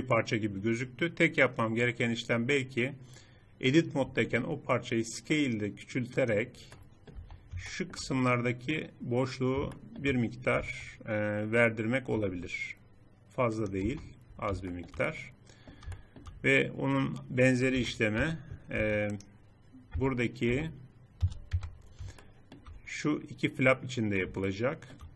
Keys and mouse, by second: 3.8 s, 6.5 click, 6.9 Tab, 10.4 Tab, 11.9 s, 13.6 Tab, 17.5 KP_7, 18.0 Tab, 18.6 Tab, 19.8 Tab, 20.3 Tab, 21.0 z, 21.3 Tab.